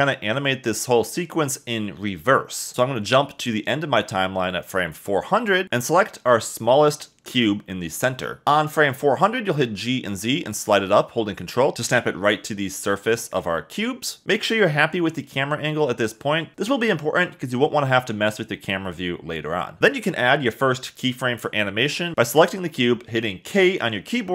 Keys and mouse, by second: 0.1 Escape, 0.7 g, 2.5 0, 6.8 click, 7.9 g, 8.8 z, 11.2 ctrl+click, 12.8 click, 13.2-18.2 typing, 14.3 Escape, 15.6 shift+click, 15.9 click, 17.3 click, 20.5 k.